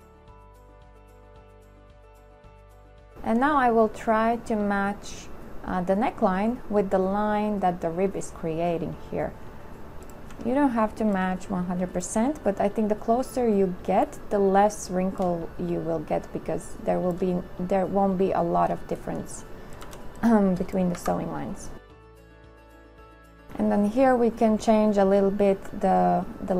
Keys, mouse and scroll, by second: 2.8 shift+click, 10.5 z, 15.5 shift+click, 20.0 v, 20.1 click, 21.2 Delete.